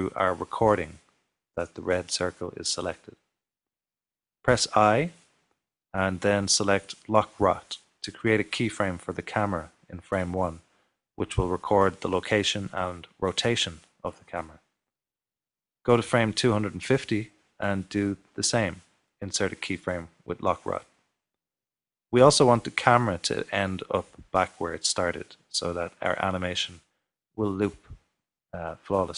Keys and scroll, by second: 5.8 typing, 27.1 typing.